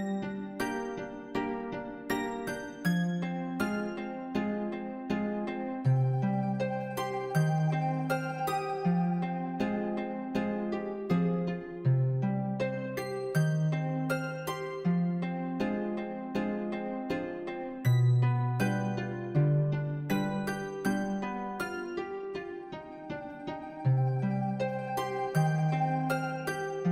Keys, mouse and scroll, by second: 0.3 s, 0.8 middle click, 0.9 scroll down 1, 1.1 middle click, 1.3 e, 1.9 middle click, 2.3 click, 2.6 g, 3.3 middle click, 3.9 Tab, 3.9 scroll down 2, 4.1 middle click, 4.2-5.0 scroll up 2, 4.3 middle click, 5.0 scroll down 2, 5.1-5.4 middle drag, 5.4 click, 5.7 alt+d, 6.1 middle click, 6.2 scroll up 1, 6.3 middle click, 6.4 g, 6.9 g, 7.2 middle click, 7.4 s, 7.7 g, 8.3 middle drag, 8.5 scroll down 1, 8.7 g, 9.0 scroll up 1, 9.2 scroll down 1, 9.2 middle drag, 9.5 g, 9.9 shift+middle drag, 10.2 scroll up 1, 10.3-10.6 middle drag, 10.6 Tab, 10.8 click, 11.3-13.7 typing, 14.4 shift+middle click, 15.1 Tab, 15.1-15.6 middle drag, 15.9 Tab, 16.2 i, 16.7 g, 17.0 Tab, 17.1-17.6 middle drag, 17.6-17.9 scroll down 1, 17.9 g, 18.2 middle drag, 18.5 ctrl+s, 18.6 middle click, 19.4 e, 19.6 Tab, 19.7-20.5 middle drag, 20.6 scroll up 1, 20.7 ctrl+z, 20.8 ctrl+z, 21.0 e, 21.4 Tab, 21.5 scroll down 1, 21.5 middle click, 21.7 scroll up 2, 21.8 scroll down 1, 21.8-22.2 middle drag, 22.2 click, 22.2 g, 22.4 shift+a, 23.4-26.9 typing, 25.0 middle click.